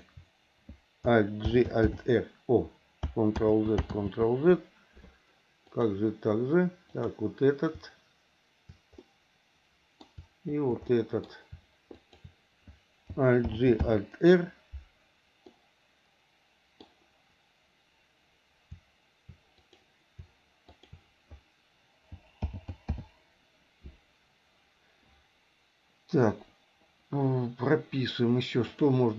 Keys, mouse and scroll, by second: 1.4 alt+g, 1.8 alt+r, 3.1 ctrl+click, 3.4 ctrl+z, 4.0 ctrl+z, 5.6 click, 6.9 click, 9.0 middle click, 10.9 middle click, 11.9 shift+click, 13.5 alt+g, 13.8 alt+r, 15.5-16.9 middle drag, 19.6 click, 20.6 shift+click, 22.5 alt+g, 22.9 alt+r, 28.7 click.